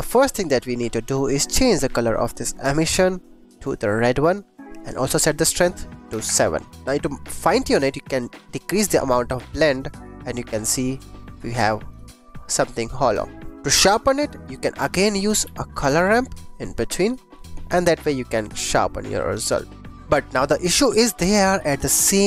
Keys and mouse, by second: 0.1 click, 1.2 click, 1.9 click, 2.6 click, 5.0-6.3 drag, 7.0 click, 8.2-11.3 shift+drag, 11.8 click, 12.4 click, 13.9 drag, 14.2 g, 14.5 click, 14.7 click, 14.9 shift+a, 17.3 click, 19.5 click, 20.0 ctrl+s.